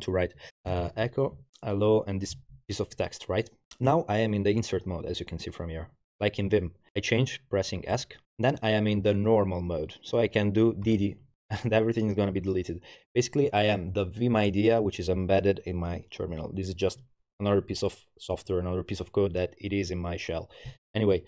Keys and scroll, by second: 0.1-1.3 typing, 1.9 Tab, 7.9 Escape, 10.9 typing.